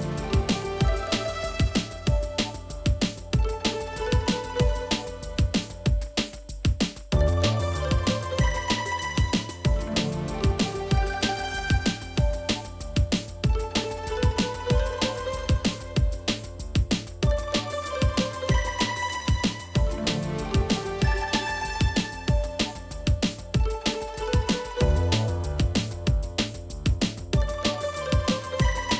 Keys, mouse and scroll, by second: 2.6 t, 3.3 w, 6.6 b, 11.2 double click, 12.1 ctrl+shift+], 16.3 double click, 21.2 space, 21.5 double click, 21.6 space, 25.4 shift+click, 28.3 double click.